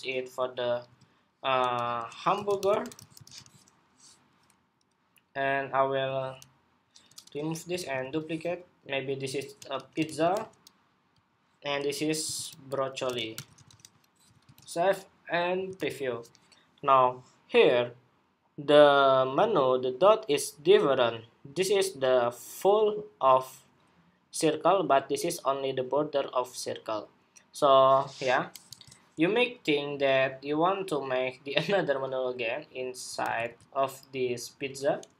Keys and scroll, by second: 7.5 super+d, 7.7 super+d, 14.2 super+s, 15.5 super+r, 28.4 super+Tab, 33.0 super+c, 33.2 super+c.